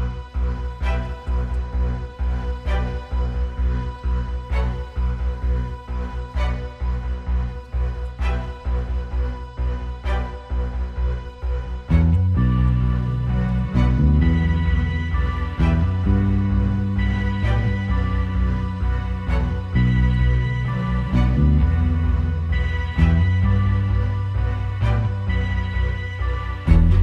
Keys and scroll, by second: 0.0 super+[, 1.3-2.8 typing, 3.3 super+space, 5.8 space, 6.5 super+space, 6.9 super+space, 7.0 super+space, 15.2 space, 16.3 space, 16.6 space, 18.4 space, 19.0 space.